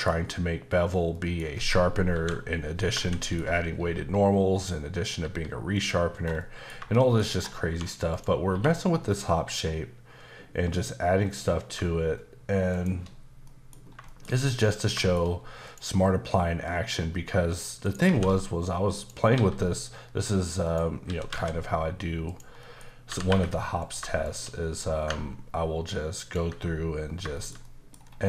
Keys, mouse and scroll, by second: 0.1-1.1 scroll up 1, 1.1 middle click, 2.1 KP_7, 3.0 shift+middle click, 3.8 g, 4.5 click, 5.2 g, 5.7 click, 6.1 scroll down 1, 6.4 middle click, 6.9 shift+middle click, 7.3-7.6 scroll down 1, 7.6 1, 8.1 click, 8.5 q, 12.7 shift+click, 13.5 middle click, 13.8 scroll down 1, 14.1 shift+middle click, 14.9 shift+middle click, 15.2-15.6 scroll up 1, 15.6 click, 17.8 shift+right click, 18.0 shift+a, 18.9 click, 19.3 s, 20.6 click, 21.0 typing, 22.3 click, 22.6 middle click, 22.8 scroll up 1, 23.1 typing, 23.8 click, 24.2 shift+click, 26.2 ctrl+click, 27.0 scroll down 2, 27.3 shift+middle click, 28.0-28.2 scroll up 4.